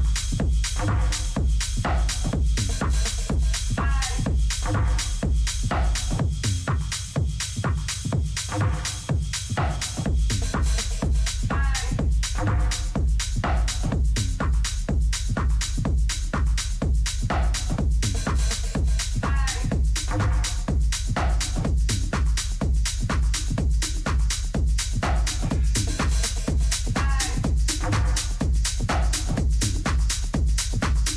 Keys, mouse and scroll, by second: 7.2-9.2 drag, 8.7-10.5 middle drag, 11.6-13.3 drag, 13.9-15.8 middle drag, 16.4 ctrl+f, 18.5 F6, 20.5 Escape, 21.2 a, 21.5-23.3 middle drag, 22.9 Tab, 25.2 middle click, 25.6 middle click, 25.8-28.3 middle drag, 30.9 t.